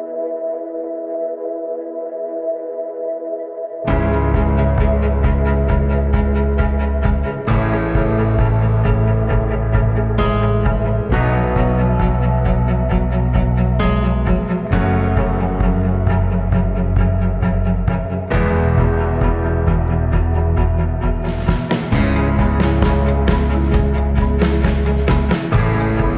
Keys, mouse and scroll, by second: 0.0 click, 0.6 click, 1.7 click, 2.5-4.4 drag, 4.8 click, 6.7 scroll down 2, 7.1 scroll up 1, 8.2 click, 10.2 right click, 10.9 click, 12.1 right click, 13.0 click, 13.8 click, 17.6 click.